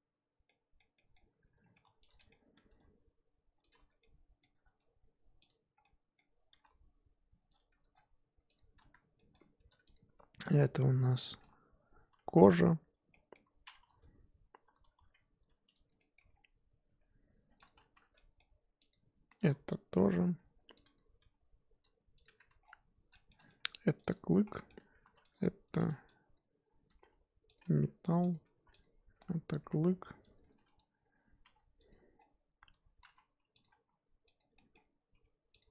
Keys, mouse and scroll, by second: 0.4-1.3 middle drag, 1.3 Tab, 1.6 scroll up 1, 1.7 1, 2.1 click, 2.2-2.6 middle drag, 2.6 g, 3.8 Tab, 4.0-4.5 middle drag, 4.5 Tab, 5.5 click, 5.8-6.6 middle drag, 6.6 g, 7.8 Tab, 7.9 scroll down 4, 8.6 click, 8.9 z, 9.2 middle click, 9.4-9.9 scroll up 1, 9.9 click, 10.1 Tab, 10.5 click, 11.4 l, 12.1 l, 12.9 scroll up 1, 13.1-14.0 middle drag, 14.0 z, 14.9 z, 15.9 click, 16.9 g, 17.9 z, 18.0 Tab, 18.1-18.9 middle drag, 18.9 click, 19.5 Tab, 19.9 a, 20.9 click, 21.3 g, 22.2 Tab, 22.6-23.1 scroll down 1, 23.1 shift+middle drag, 23.4 scroll up 1, 23.5-24.0 middle drag, 24.1 click, 24.2 scroll up 4, 24.4 scroll down 1, 24.5 middle drag, 24.8 Tab, 25.0 3, 25.2 click, 26.4 click, 26.9 g, 27.6 Tab, 28.3 click, 28.4 Tab, 28.8 click, 29.6 l, 31.5 g.